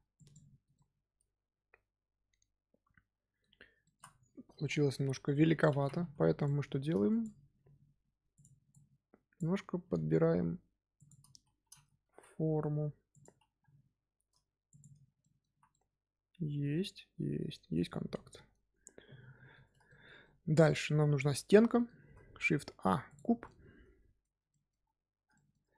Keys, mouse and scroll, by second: 0.1 click, 0.7-3.7 middle drag, 3.8 shift+middle drag, 4.0-4.5 scroll up 2, 4.5 KP_3, 5.1-5.5 scroll up 2, 5.5 Tab, 6.4 click, 7.5 g, 8.6 click, 9.7 g, 14.8 Tab, 15.0 scroll up 1, 15.0 scroll down 2, 15.1 middle drag, 15.4 z, 15.6-18.7 middle drag, 19.8-21.9 shift+middle drag, 21.9 shift+a, 23.4-24.8 middle drag, 24.8 scroll up 2, 25.3-25.7 shift+middle drag.